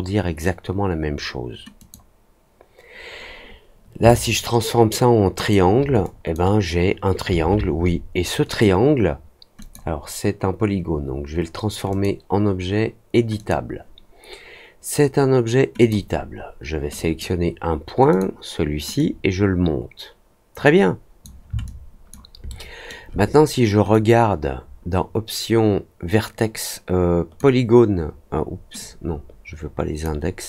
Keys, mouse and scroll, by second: 1.7 click, 4.0-5.4 alt+drag, 6.0 drag, 9.5 click, 11.8 click, 13.3 click, 15.7 click, 16.9 drag, 18.0 click, 18.9-21.2 drag, 21.6-22.0 alt+drag, 22.4-22.8 alt+middle drag, 23.8-27.3 drag, 28.7-30.0 drag.